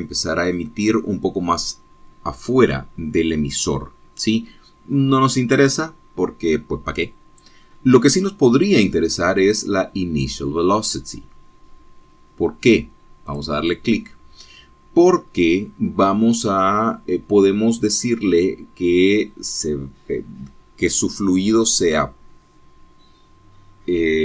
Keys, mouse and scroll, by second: 8.9-9.3 scroll down 2, 14.5 click, 16.3-16.7 scroll down 2.